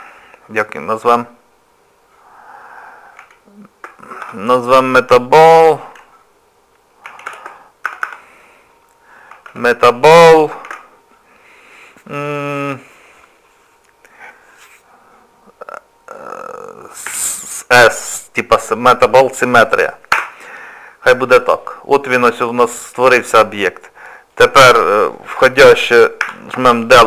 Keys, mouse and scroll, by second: 8.0 BackSpace, 24.3 click, 26.2 Delete.